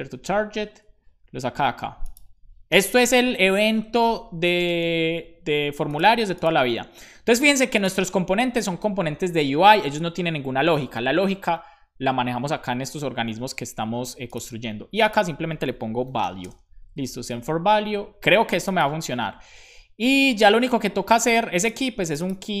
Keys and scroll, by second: 2.9 shift+[, 2.9 space, 3.7 Right, 3.8 Right, 4.4 Left, 4.4 shift+], 4.6 space, 4.9 super+s, 15.7-17.2 typing, 17.3 super+s, 19.0 super+c.